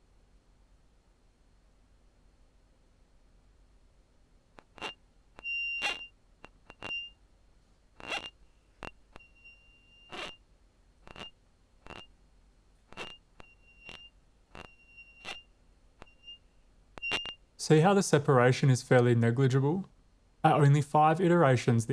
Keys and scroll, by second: 0.0-0.7 typing, 2.6 w, 4.1 w, 17.7 space, 18.1 super+z, 18.4 super+z, 18.6 super+z, 20.5 shift+super+r, 21.5 Return.